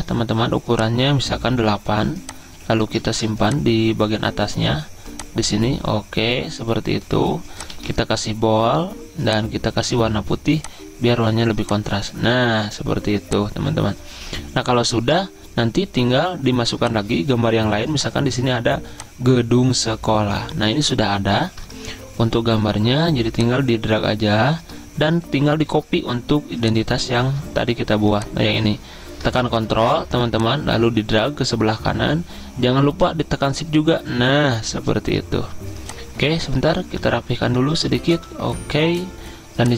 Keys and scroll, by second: 3.4 z, 8.1 ctrl+a, 37.2 Up, 37.4 Up, 37.6 Up, 37.9 Up, 38.2-38.6 typing.